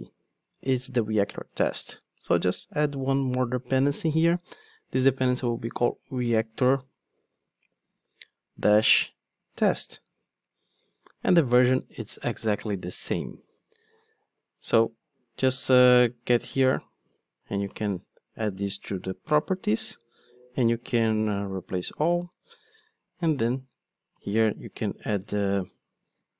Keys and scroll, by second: 4.1 Return, 9.6 Return, 17.8 alt+super+v, 22.5 Tab.